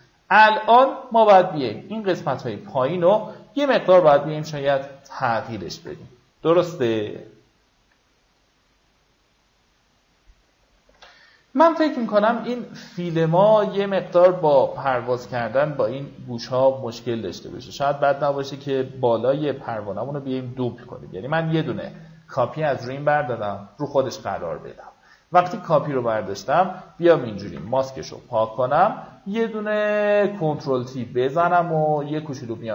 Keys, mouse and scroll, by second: 3.3 v, 3.9-4.4 alt+scroll down 1, 5.0 alt+scroll up 1, 7.8-10.3 drag, 11.8-12.2 alt+scroll down 1, 13.1-13.4 alt+scroll down 1, 13.9-14.3 alt+scroll up 2, 14.9-15.6 alt+scroll up 2, 16.5 click, 24.1 click, 24.4 right click, 25.2 click, 30.6 alt+click.